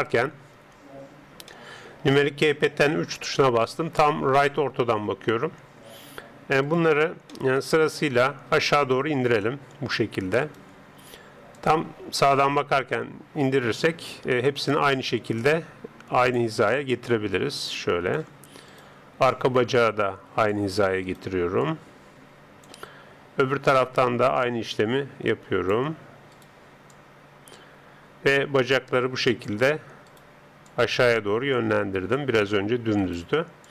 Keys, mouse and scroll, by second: 0.8 middle click, 1.5-2.6 drag, 6.7 right click, 7.4-8.9 middle drag, 9.4-12.8 drag, 10.4 right click, 12.4 KP_3, 14.7 right click, 15.4 click, 15.4-20.4 middle drag, 21.1 right click, 21.6 click, 21.6-23.2 middle drag, 23.7 right click, 24.3 click, 26.3 right click, 27.0 click, 30.1 right click, 30.7 click, 33.0 right click.